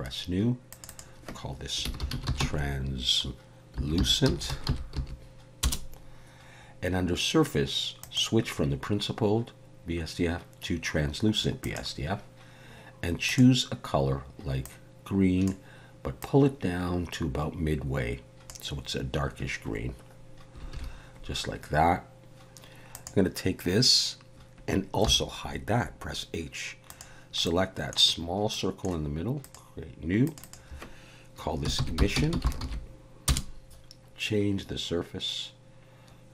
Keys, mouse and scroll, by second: 0.7 click, 0.9 click, 8.0 click, 13.3 click, 20.7 alt+a, 22.9 click, 25.0 h, 26.9 click, 27.4 middle click, 28.2-28.5 scroll up 1, 28.5 middle click, 29.4 click, 30.3 click, 30.4 click, 32.3 s.